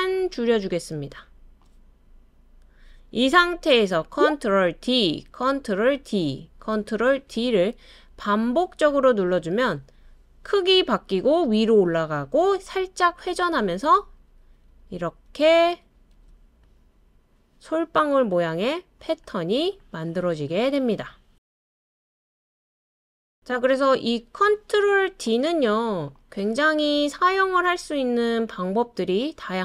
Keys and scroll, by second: 4.8 super+d, 6.0 super+d, 7.3 super+d, 8.6 super+d, 9.8 super+d, 13.6 super+d, 13.9 super+d, 14.1 super+d.